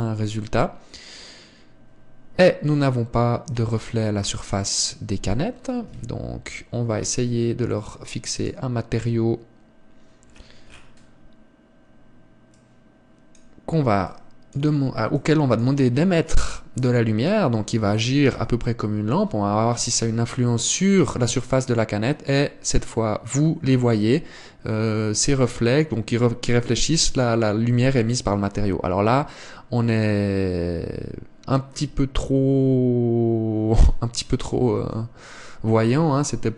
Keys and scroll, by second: 6.8 Escape, 35.6 Escape.